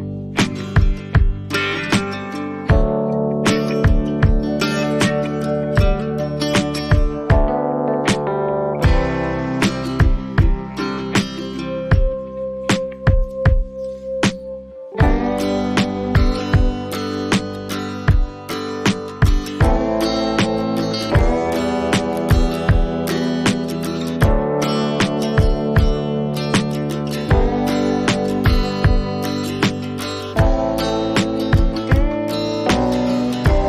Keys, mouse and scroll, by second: 3.2 shift+click, 7.2 click, 10.4 click, 12.6 click, 14.5 click, 17.3 click, 20.7 click, 22.6 click, 30.1 click.